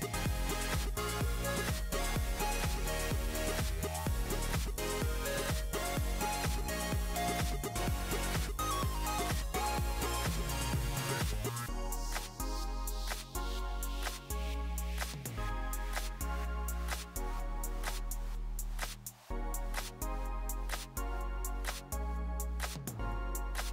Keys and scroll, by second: 0.0-0.6 typing, 3.2 typing, 10.4 typing, 15.2-16.2 typing, 22.9 typing, 23.3 Return.